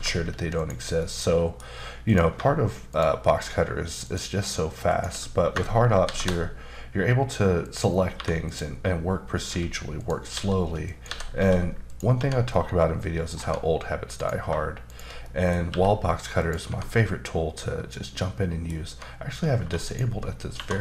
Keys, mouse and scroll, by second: 0.5 click, 1.0 middle click, 2.0 click, 2.9 shift+click, 4.0 shift+double click, 4.9 shift+click, 6.0 ctrl+shift+b, 7.6 click, 8.1 3, 8.4 click, 9.4-11.4 typing, 10.0 click, 10.9 click, 11.9 click, 12.1 Tab, 12.5 middle click, 13.4 Tab, 14.1 click, 14.9 shift+click, 15.2 middle click, 15.7 e, 16.4 click, 16.7 Tab, 16.9 middle click, 18.9 Tab, 19.6 1, 19.8 click, 20.5 2.